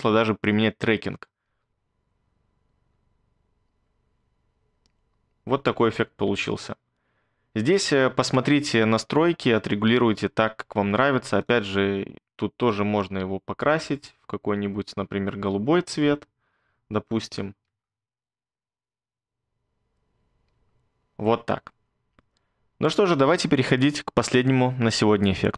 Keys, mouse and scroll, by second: 1.5 space, 6.3 space, 17.7 space, 20.5 space.